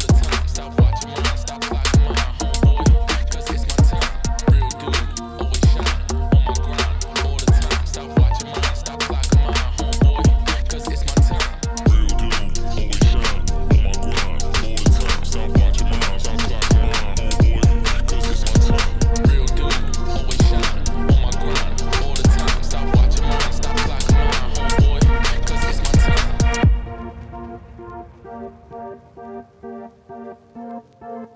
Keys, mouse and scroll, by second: 7.1 click, 10.4-11.8 drag, 12.3 h, 13.6 click, 15.5 click, 16.2-17.1 scroll up 1, 17.1 scroll down 2, 17.9 click, 18.0 Tab, 18.3 click, 18.5 shift+click, 19.5-22.3 typing, 20.1 Tab, 20.8 Tab, 21.0 Tab, 21.3 Tab, 21.5 click, 24.4 middle click, 24.8 scroll up 4, 25.1 KP_7, 25.7 z, 29.7 middle click, 30.0 2, 30.2 Left, 30.4 f, 30.7 Left, 31.0 middle click, 31.1 e.